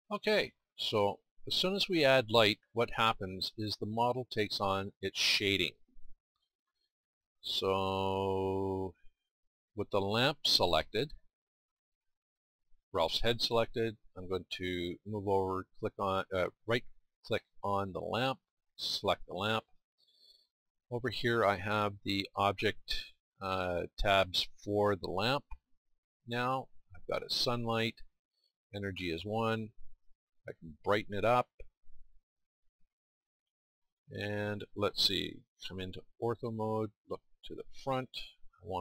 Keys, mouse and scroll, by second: 0.6-1.2 drag, 8.5-27.4 drag, 29.8-33.6 drag, 33.6-38.8 middle drag.